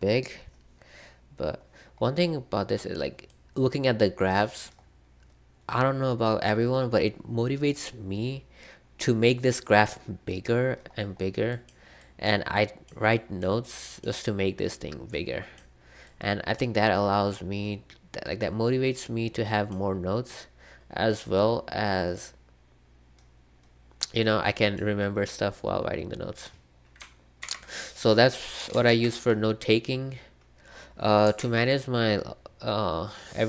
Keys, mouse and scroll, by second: 4.4-8.8 drag, 8.8-9.4 scroll down 1, 9.4-10.4 scroll up 1, 10.4-12.2 scroll up 1, 11.7-26.7 drag, 27.4 ctrl+w, 28.8 super+c, 31.3 super+2.